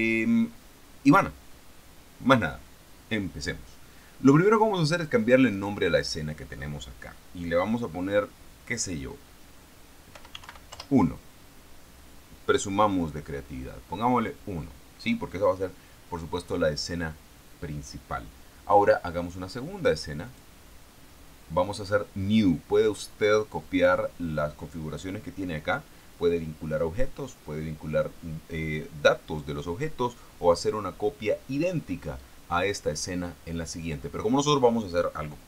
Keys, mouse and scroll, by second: 5.3 click, 5.9 click, 10.5 u, 10.7 n, 11.1 o, 11.1 Return, 20.6 click.